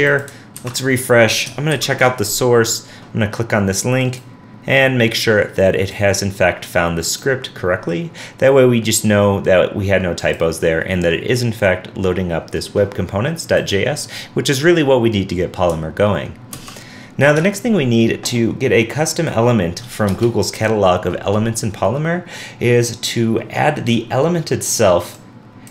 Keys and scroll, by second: 0.6 super+r, 1.7 super+r, 1.9 alt+super+u, 16.5 super+Tab.